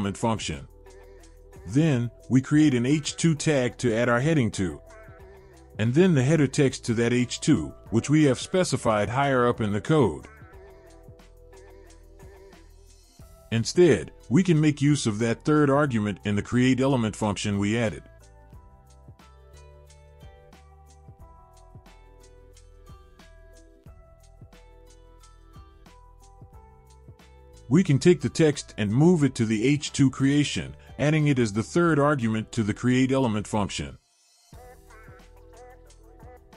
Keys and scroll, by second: 33.9 shift+Right, 35.2 ctrl+x.